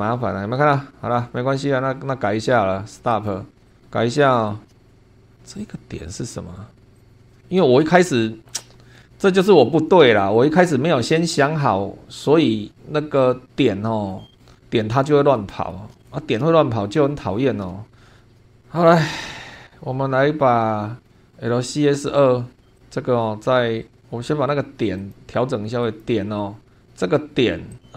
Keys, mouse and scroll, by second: 3.1 click, 3.7 middle click, 4.5 shift+middle click, 4.7 shift+scroll up 1, 5.4-5.8 scroll up 1, 7.0 click, 7.2 shift+middle click, 7.4-8.0 shift+scroll down 2, 8.2-8.7 shift+middle drag, 8.9 shift+scroll down 1, 10.6 scroll up 1, 12.7 scroll up 1, 13.6-14.7 scroll down 8, 15.4 shift+click, 15.5 shift+middle click, 16.0 shift+middle click, 18.2 shift+middle click, 18.9-19.4 scroll up 2, 19.5 scroll up 2, 21.0 scroll down 2, 21.7-22.8 scroll up 6, 22.8 click, 25.0 click, 25.8 click, 27.7 right click.